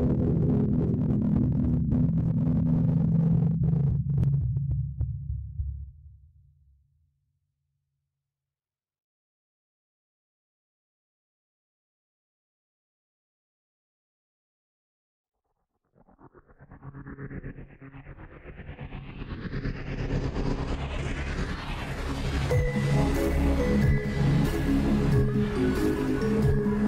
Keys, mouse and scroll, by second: 7.2 scroll down 2, 10.1-20.2 drag, 20.2 scroll down 1, 20.4-20.8 middle drag, 20.8-23.1 drag, 23.1 a, 23.3 click, 23.8 shift+a.